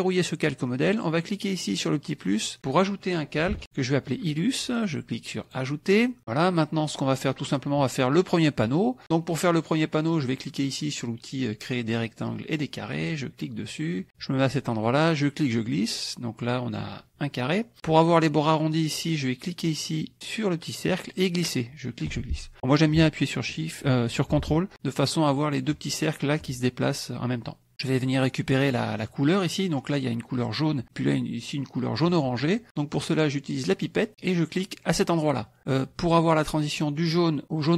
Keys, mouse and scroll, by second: 0.1 click, 2.3 click, 3.1-4.1 typing, 5.4 click, 6.2 click, 6.9 click, 8.6 click, 12.9 click, 14.8-16.9 drag, 20.8-25.8 drag, 26.5-27.7 ctrl+drag, 33.7 click, 34.9 click.